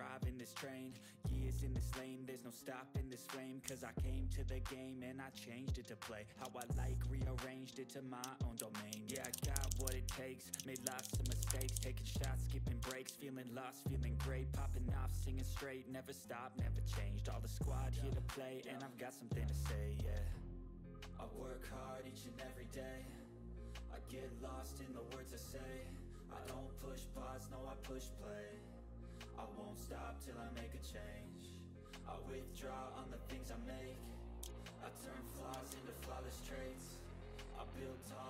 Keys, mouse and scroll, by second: 3.6 h, 3.9 scroll down 1, 4.6 click, 6.5 ctrl+d, 6.7 click, 8.5-12.2 typing, 12.6 click, 12.8 ctrl+s, 13.6-17.0 drag, 21.2-24.0 drag, 24.0 click, 25.5 click, 28.0 click, 30.5-33.9 drag, 34.4 ctrl+d, 34.6-35.6 drag, 35.6 ctrl+d, 35.9 click, 37.5-38.2 drag.